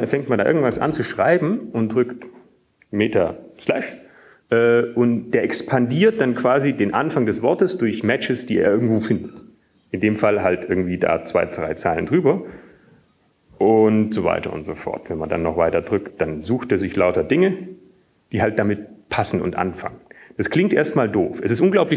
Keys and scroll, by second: 0.3 Up, 0.3 Return, 0.3 Tab, 2.1-2.6 typing, 4.0 alt+/, 15.0 alt+/, 16.0 alt+/, 17.5 alt+/, 18.6 alt+/, 20.1 alt+/.